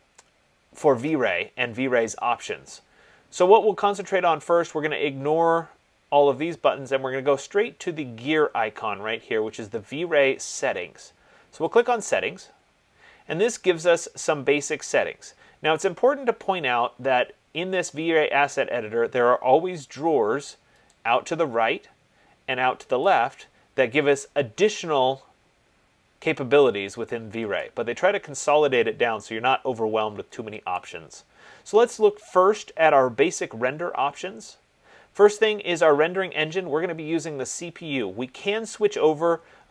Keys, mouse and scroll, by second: 12.0 click, 21.2 click, 23.3 click, 27.9 click, 31.1 click.